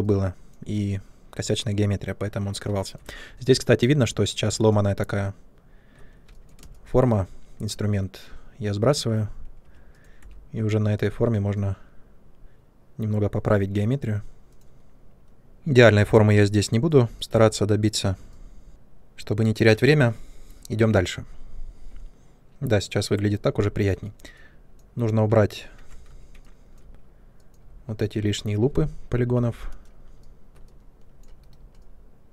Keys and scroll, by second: 4.7 ctrl+space, 6.5 space, 9.6-10.1 typing, 18.7 space, 25.7 Tab, 29.2 p, 31.4 Delete.